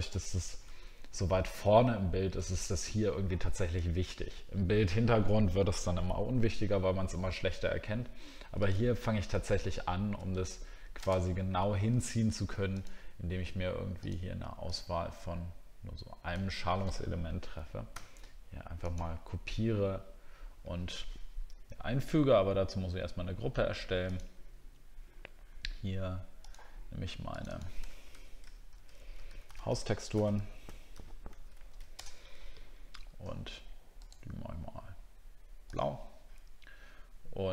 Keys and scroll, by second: 1.9 alt+scroll down 1.